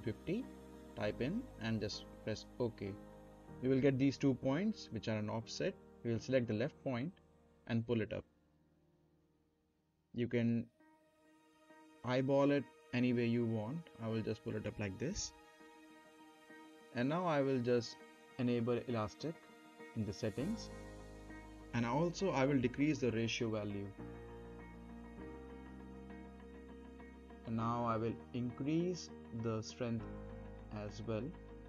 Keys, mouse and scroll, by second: 1.8-2.5 typing, 2.1 click, 3.6 middle click, 3.9-4.2 scroll down 1, 4.2 middle click, 4.6 click, 5.7 z, 6.8 click, 7.9 Up, 13.9-14.4 scroll up 1, 14.4-15.7 middle drag, 16.2 click, 19.1 click, 19.1 click, 20.8-21.4 middle click, 21.4-21.7 scroll down 1, 21.7-22.3 middle drag, 23.9-28.0 drag.